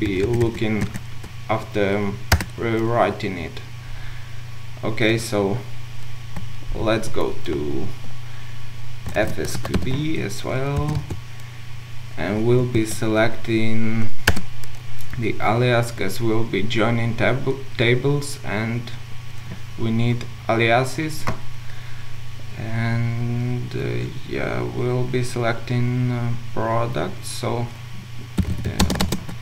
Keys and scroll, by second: 0.1 ctrl+shift+Left, 10.8 Return.